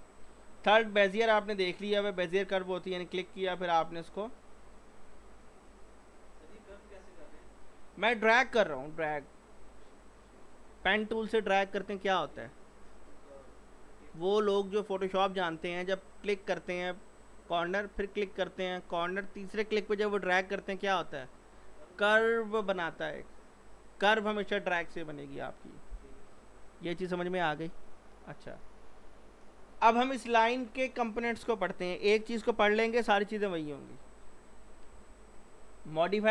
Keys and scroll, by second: 28.8 Escape.